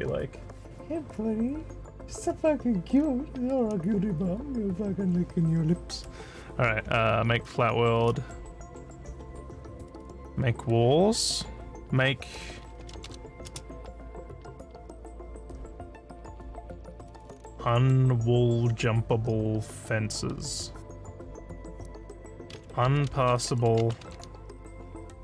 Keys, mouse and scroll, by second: 12.5-13.5 typing, 22.8-24.1 typing.